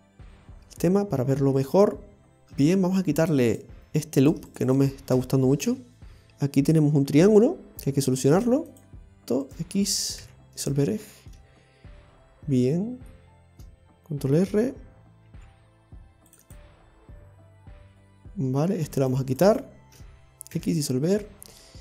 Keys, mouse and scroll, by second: 0.2-0.8 scroll up 1, 0.8 middle click, 3.5 click, 4.2 right click, 4.5 alt+shift+right click, 5.1 alt+shift+right click, 5.7 x, 6.2 shift+middle click, 6.2 scroll up 2, 8.4 click, 8.7 click, 9.5 right click, 10.3 x, 11.3 middle click, 13.3 scroll down 1, 14.3-15.3 scroll down 1, 15.3 ctrl+r, 19.0 right click, 19.4 alt+shift+right click, 20.6 alt+shift+right click, 20.6 x, 21.2-21.7 scroll down 3, 21.7 middle click.